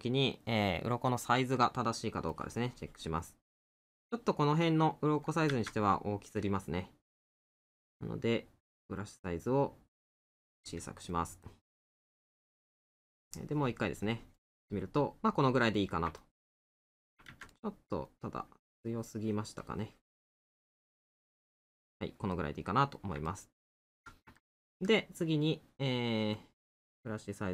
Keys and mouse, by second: 3.3 middle click, 7.1 right click, 11.1 middle click, 14.7 middle click, 16.2 middle click, 22.4 middle click, 24.6 middle click, 26.4 right click.